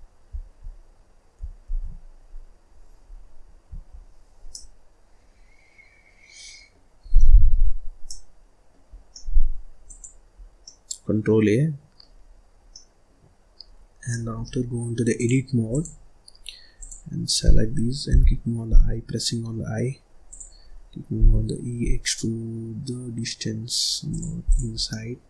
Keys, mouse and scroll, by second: 1.7 shift+s, 3.9-4.5 scroll up 1, 4.5-7.0 middle drag, 7.0 scroll down 1, 7.1 middle click, 7.6-8.0 scroll up 1, 8.0 middle click, 8.9 scroll down 1, 9.1 middle click, 9.4-9.8 scroll up 1, 9.8 click, 10.3 scroll down 1, 10.6-12.2 middle drag, 12.2-12.5 scroll up 3, 12.5 scroll down 1, 12.7-13.8 middle drag, 13.8 scroll down 1, 14.1-15.1 middle drag, 15.1-16.4 drag, 16.4-16.7 scroll up 1, 16.7 click, 17.3-18.1 scroll up 1, 21.1 e, 24.4 click, 24.7 scroll down 1, 24.9 middle click.